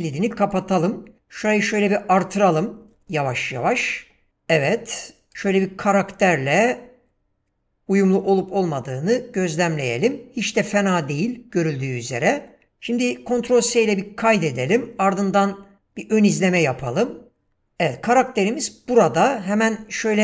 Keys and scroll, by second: 13.4 ctrl+s, 18.5 w.